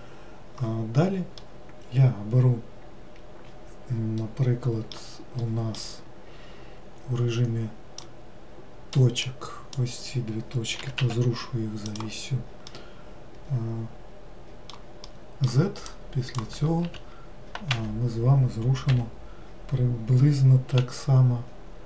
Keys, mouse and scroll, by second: 1.3-4.4 middle drag, 5.3-8.0 middle drag, 8.0 click, 10.8 g, 12.6-15.9 middle drag, 15.9 click, 16.8 z, 18.9 g.